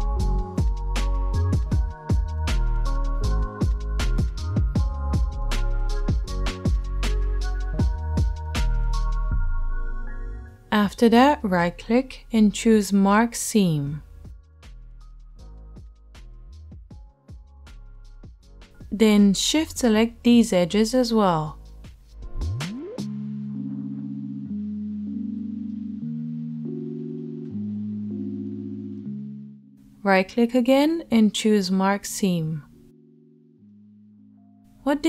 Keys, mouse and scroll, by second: 0.4 right click, 0.5-1.7 drag, 1.7 shift+middle click, 1.8 shift+click, 2.5-3.7 shift+right drag, 3.7 shift+middle click, 3.8-6.6 shift+right drag, 6.6-7.8 middle drag, 7.8 right click, 8.3 middle click, 9.2-21.2 right drag, 19.2 middle click, 21.2 shift+middle click, 21.3 shift+right click, 22.1 shift+middle click, 22.3-28.5 shift+right drag, 28.5 middle click, 28.7 click, 28.9 middle click, 29.1-35.0 right drag.